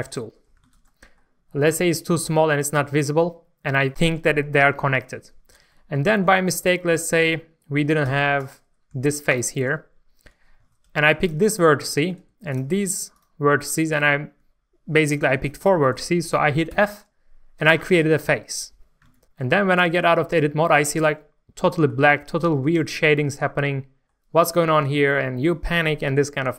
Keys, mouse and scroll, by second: 0.3 scroll down 1, 0.7 alt+a, 0.8 middle click, 1.6-2.4 scroll down 1, 2.8 scroll up 1, 5.7 shift+middle click, 8.0 3, 8.3 click, 8.9 click, 9.9-10.6 scroll up 1, 10.6-11.2 scroll up 1, 11.2 click, 11.8 shift+middle click, 12.5 shift+click, 13.1 shift+click, 13.6 shift+click, 16.7 f, 19.0 alt+a, 19.2 Tab, 19.4-19.8 scroll down 1, 19.9-22.1 middle drag, 22.1 scroll up 1, 22.4 shift+middle click.